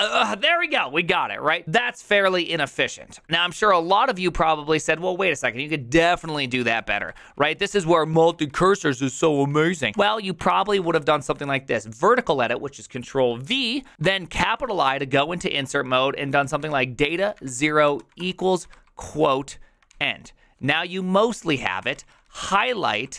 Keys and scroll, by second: 0.0-0.6 typing, 6.6 ctrl+c, 6.8-8.0 typing, 9.7-10.9 typing, 10.5 ctrl+v, 14.3 shift+i, 16.3-18.7 typing, 19.9 ctrl+c, 21.5-23.1 typing.